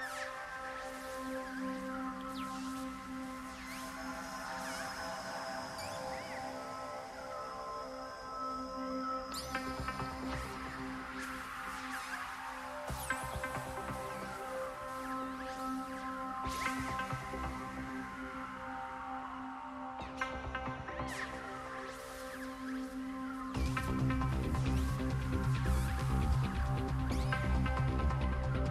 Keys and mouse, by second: 0.0 click, 0.6 Tab, 1.1 Tab, 1.9-6.9 right drag, 7.1 click, 7.6 alt+m, 9.5-10.6 drag, 9.7 alt+m, 10.6 ctrl+Tab, 11.9 shift+e, 12.0 click, 12.3 Tab, 12.8 Tab, 13.7 click, 14.1 g, 14.6 Tab, 15.5 Tab, 16.1 click, 16.5 g, 17.6 Tab, 18.2 Tab, 18.8 ctrl+Tab, 19.2 click, 20.2 shift+e, 20.4 Tab, 20.9 Tab, 22.3 g, 23.9 g, 25.3 g, 25.9 Tab, 26.8 Tab, 27.5-28.5 drag, 28.5-28.7 right drag, 28.5 j.